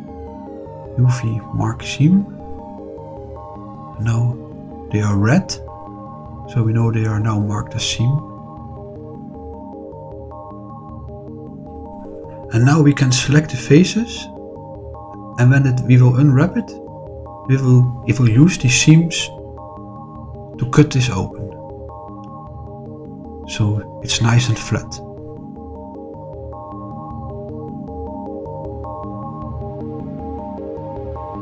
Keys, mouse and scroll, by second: 0.7 middle click, 1.9 click, 3.6 click, 4.4-6.3 scroll up 4, 6.3-8.3 middle drag, 9.2 middle click, 10.1 middle click, 11.2 middle click, 11.9-13.4 scroll down 2, 13.6 shift+middle click, 14.3 middle click, 17.1 click, 19.0 click, 19.7 shift+click, 20.0 middle click, 20.8 shift+click, 21.7 shift+click, 22.1-25.0 middle drag, 26.1 shift+click, 27.0-28.0 middle drag, 28.4 shift+click, 28.8 middle click, 31.0 shift+click.